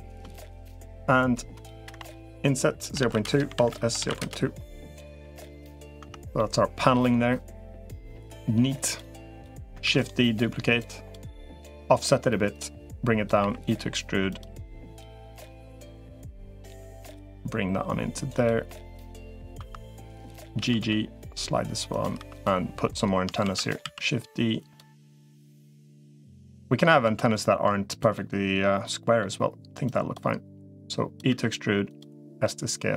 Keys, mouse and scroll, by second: 1.7 i, 3.3 alt+s, 5.2 middle click, 5.9 Tab, 6.2-7.6 middle drag, 7.9 middle click, 9.1 Tab, 9.1 click, 9.7 shift+d, 10.7 click, 11.5 click, 12.5 click, 13.3 e, 14.5 middle click, 15.1 click, 15.7 l, 16.5 l, 17.1-18.3 drag, 18.5 middle click, 19.5 2, 20.5 g, 22.1 click, 22.1 3, 23.3 shift+d, 23.7 s, 26.9 s, 27.9-29.0 middle drag, 29.7 click, 30.5 click, 31.1-32.9 typing.